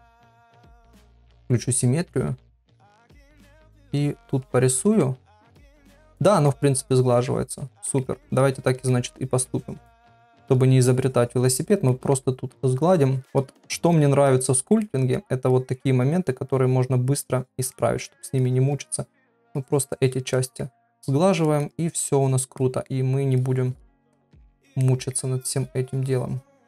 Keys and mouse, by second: 1.3-1.7 ], 2.9 [, 3.0 [, 4.0 click, 5.0 middle click, 5.8 click, 6.3 middle click, 6.9 click, 7.9 middle click, 8.4 click, 8.9 middle click, 9.5-10.6 drag, 10.9 click, 11.9 middle click, 12.6 click, 13.4 click, 14.3 click, 14.8 middle click, 15.5 click, 16.2 click, 16.5 click, 17.2 click, 17.7 middle click, 18.4 click, 18.9 click, 19.6 click, 20.4 middle click, 21.0 click, 21.8 click, 22.6 middle click, 23.4 click, 24.0 click, 24.8 middle click, 25.6 click, 26.5 click.